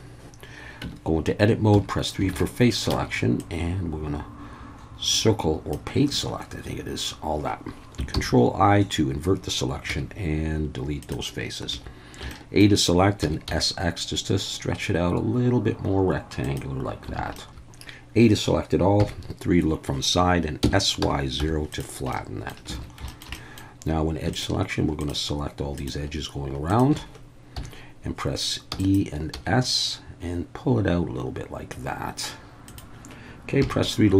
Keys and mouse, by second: 0.8 Tab, 1.7 3, 2.3 alt+a, 2.9 c, 6.1 Escape, 8.1 ctrl+i, 9.9 x, 11.7 a, 12.3 shift+middle click, 13.2 s, 13.5 x, 16.4 click, 17.2 alt+a, 17.3 middle click, 17.5 KP_1, 19.0 KP_3, 20.6 s, 21.0 y, 21.4 0, 21.7 click, 22.1 middle click, 22.8 alt+a, 23.1 shift+middle click, 23.4 middle click, 25.0 alt+shift+click, 25.7 alt+shift+click, 27.6 KP_1, 28.7 e, 29.3 s, 32.7 click, 33.6 KP_3.